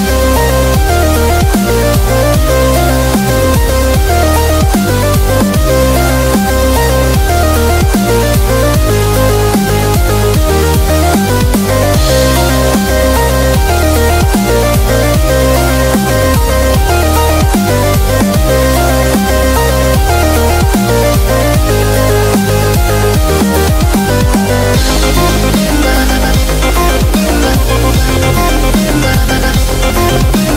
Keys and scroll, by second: 0.0-0.1 typing, 1.2 typing, 5.7-6.0 typing, 8.2 typing, 18.7 super+i, 19.8 b, 24.4 [, 25.9-26.5 typing, 27.6-28.2 typing, 29.8-30.5 typing.